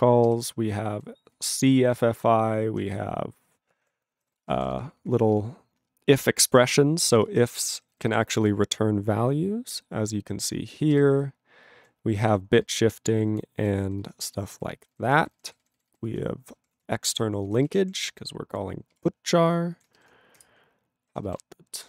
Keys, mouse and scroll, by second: 0.0 ctrl+alt+f, 0.3 ctrl+g, 0.6 ctrl+n, 0.8-2.6 ctrl+n, 3.1 ctrl+p, 3.7 ctrl+p, 4.1 ctrl+n, 4.2 ctrl+a, 4.3 ctrl+space, 4.4 ctrl+e, 4.4 ctrl+n, 4.6 ctrl+n, 4.7 ctrl+g, 4.8 ctrl+p, 5.0 ctrl+f, 5.3 ctrl+space, 7.1 ctrl+g, 7.3 ctrl+space, 7.7 ctrl+alt+b, 7.8 ctrl+alt+b, 10.9 ctrl+g, 11.0-11.9 ctrl+n, 12.3 ctrl+n, 14.0 ctrl+n, 15.1 ctrl+n, 15.5 ctrl+n, 15.6 ctrl+n, 15.9 ctrl+n, 16.4 ctrl+p, 16.6 ctrl+p, 16.7 ctrl+a, 17.1 ctrl+e, 17.4 ctrl+g, 17.6 ctrl+space, 17.7 ctrl+a, 17.7 ctrl+p, 17.8 ctrl+p, 18.9 ctrl+g, 20.4 ctrl+Return.